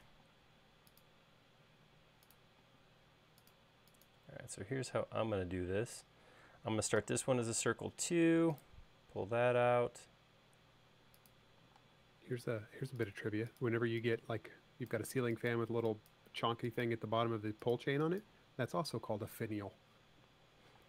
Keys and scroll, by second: 0.4 r, 2.9 l, 7.2 c, 12.0 l, 14.0 e, 20.5-20.8 typing.